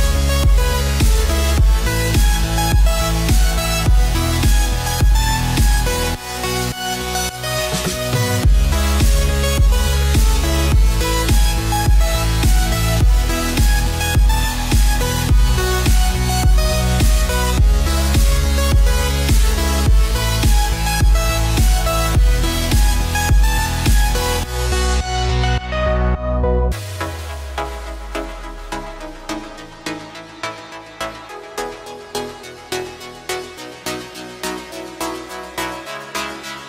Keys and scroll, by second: 35.6 ctrl+t.